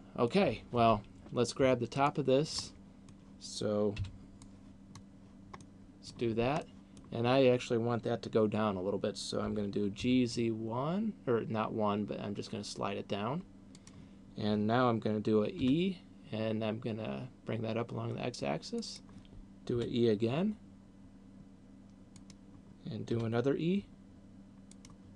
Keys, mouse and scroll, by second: 0.2 middle click, 2.2 alt+right click, 2.9 middle click, 4.2 b, 5.9 middle click, 6.9 middle click, 9.7 g, 14.4 click, 15.9 e, 19.4 click, 19.9 e, 22.7 click, 23.2 e.